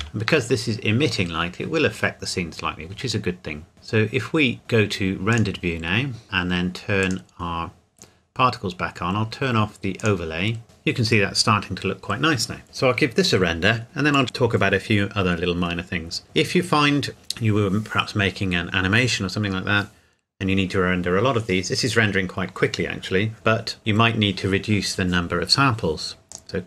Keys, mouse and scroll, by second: 5.3 click, 7.0 click, 10.0 click, 10.6 scroll up 1, 26.3 click.